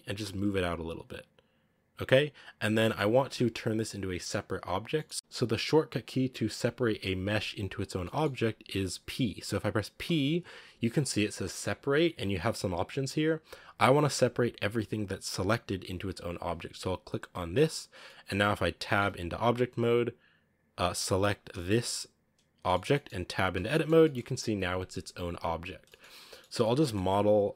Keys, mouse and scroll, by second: 2.5 scroll down 1, 2.7-17.5 shift+middle drag, 17.9 middle click, 18.2-18.9 scroll down 1, 18.9 Tab, 20.6 right click, 21.4 KP_Decimal, 22.0-22.5 scroll up 2, 22.5 middle click, 22.7 scroll down 1, 22.8-23.4 middle drag, 23.4 Tab, 23.6 middle click, 24.4 a, 25.5-25.8 scroll up 1, 25.8 middle click, 25.9 scroll down 1, 26.1-26.7 scroll up 2, 26.2 middle click, 26.7 shift+middle click, 27.0-27.5 scroll down 1.